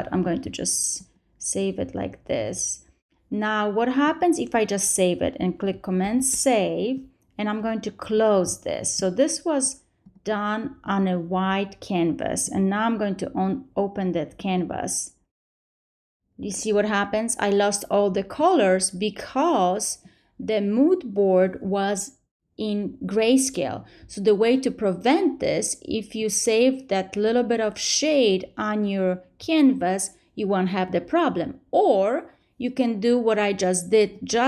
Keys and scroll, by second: 5.9 super+s.